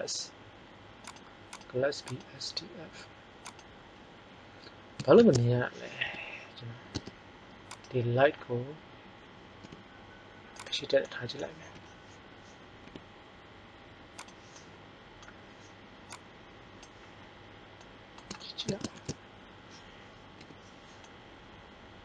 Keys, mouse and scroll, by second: 5.1 shift+z, 6.0 KP_1, 6.9 Tab, 9.6 g, 11.6 KP_7, 12.5-12.8 middle drag, 12.8 r, 14.3-14.7 drag, 18.9 shift+z, 20.4 KP_5.